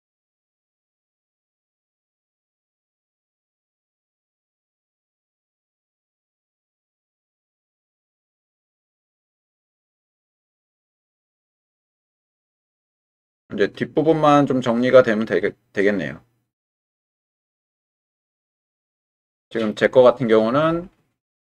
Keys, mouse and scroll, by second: 0.3 click, 1.1 click, 1.5 g, 1.6 x, 3.0 g, 3.2 x, 4.1 click, 5.2 click, 5.6-7.2 middle drag, 8.0-17.9 middle drag, 18.8 shift+middle click, 19.3 middle click.